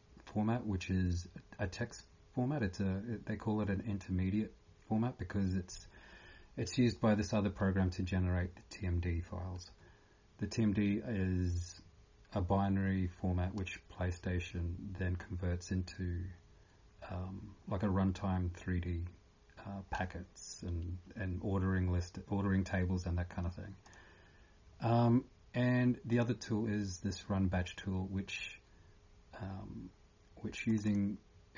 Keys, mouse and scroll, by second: 23.8 click.